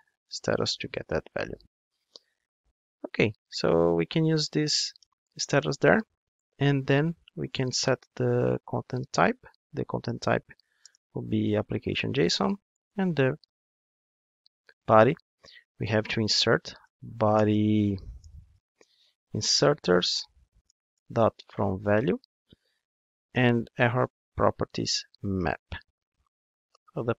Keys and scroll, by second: 2.6 alt+super+l, 4.9 Return, 20.7 Return.